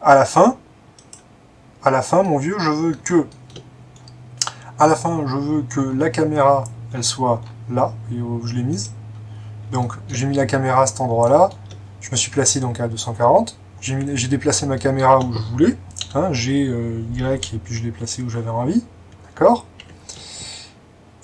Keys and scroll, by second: 16.1 g, 19.8 Escape, 19.8 typing.